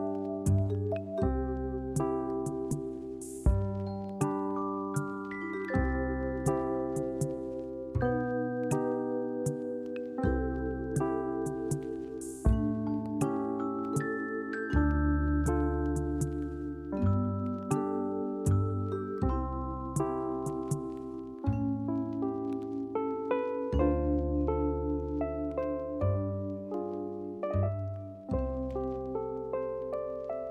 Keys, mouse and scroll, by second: 1.1 click, 2.8 ], 4.2 click, 4.9-5.3 scroll down 5, 5.7 Tab, 6.3 alt+z, 6.6 click, 8.0 click, 10.3 Tab, 11.9 right click, 13.1 click, 13.5 click, 14.3 click, 14.7 right click, 17.6 click, 18.3 alt+z, 19.1 click, 20.3 click, 23.1 click, 23.5 ctrl+z, 23.7 shift+click, 24.2 s, 26.3 click, 27.7 click, 28.3 click.